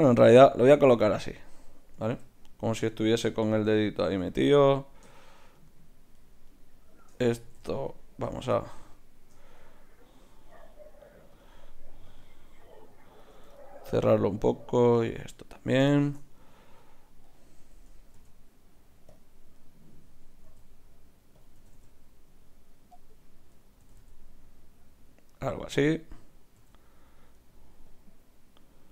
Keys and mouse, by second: 0.4 r, 2.0 r, 3.7 r, 7.0-10.5 drag, 8.1 ctrl+z, 11.4-14.0 drag, 13.6 middle click, 13.8 right click, 14.5-15.8 right drag, 15.0 click, 15.9-16.9 drag, 15.9-19.0 right drag, 18.2 g, 19.6-21.3 right drag, 20.5 r, 21.6 g, 23.8 r, 26.2-27.8 right drag, 26.7 r, 27.9-28.9 drag.